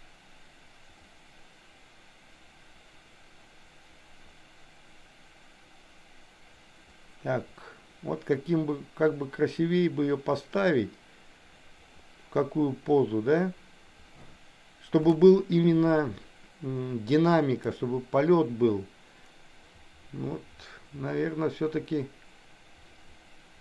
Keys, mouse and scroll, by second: 17.7-23.6 drag.